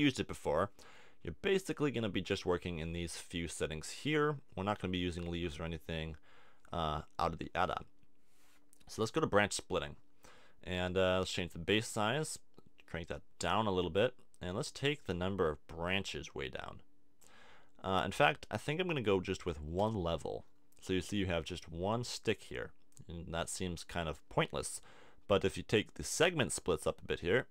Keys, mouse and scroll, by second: 26.9-27.5 drag.